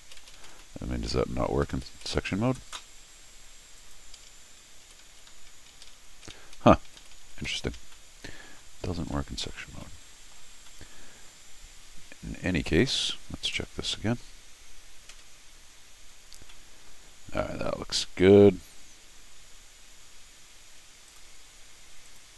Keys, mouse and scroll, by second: 0.0 shift+Tab, 0.3 shift+Tab, 0.6 middle click, 1.0 middle click, 1.5 shift+Tab, 1.7 shift+Tab, 1.9 shift+Tab, 2.1 shift+Tab, 3.8 click, 4.7 shift+Tab, 5.0 shift+Tab, 5.3 shift+Tab, 5.7 shift+Tab, 6.1 shift+Tab, 6.3 shift+Tab, 6.5 shift+Tab, 6.9 shift+Tab, 7.0 shift+Tab, 7.1 shift+Tab, 7.3 shift+Tab, 7.5 shift+Tab, 7.9 middle click, 8.9 scroll down 1, 9.1 middle click, 9.7 scroll down 1, 9.8 middle click, 10.6 scroll up 1, 10.7 middle click, 12.6 click, 15.8 scroll down 1, 16.4 scroll up 2, 16.5 middle click, 17.2 scroll up 2, 17.4 middle click, 18.3-19.3 scroll down 1, 20.1-20.4 scroll up 1, 21.1 click, 22.0 click.